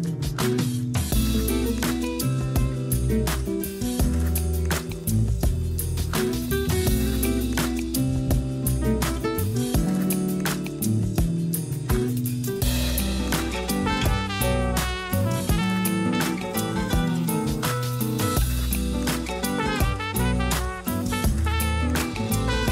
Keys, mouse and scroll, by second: 0.7-1.5 middle drag, 1.5 KP_0, 2.3 a, 2.5 a, 2.9-3.7 scroll up 5, 3.9-4.3 scroll up 1, 4.3-7.3 shift+middle drag, 8.9 scroll down 1, 13.5 click, 14.4-17.4 drag, 19.5 click, 21.1 click.